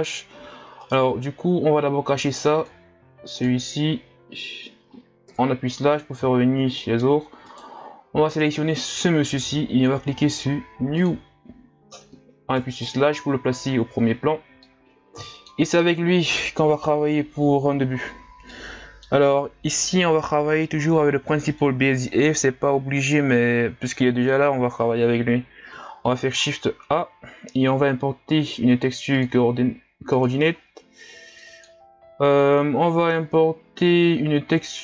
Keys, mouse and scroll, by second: 7.5 right click, 14.7-23.6 middle drag, 23.6-34.8 drag.